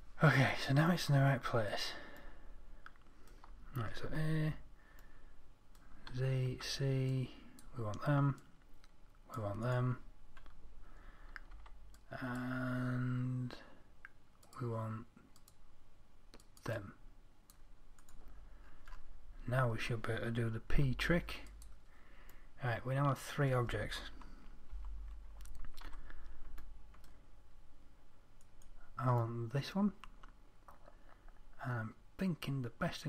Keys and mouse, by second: 4.5 a, 6.5 z, 6.9 c, 10.5-15.2 middle drag, 11.9 c, 18.5-21.2 drag, 21.2-22.9 middle drag, 21.2 p, 22.9-24.6 drag, 25.2 Tab, 26.3 z, 28.8-30.1 right drag, 30.1-32.3 middle drag.